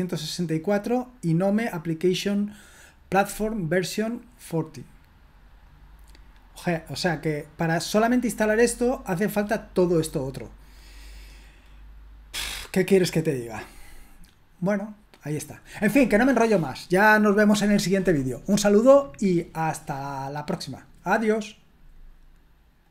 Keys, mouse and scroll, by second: 1.1 click, 7.7 click, 9.5-13.2 drag, 13.7-18.9 drag, 22.8 click.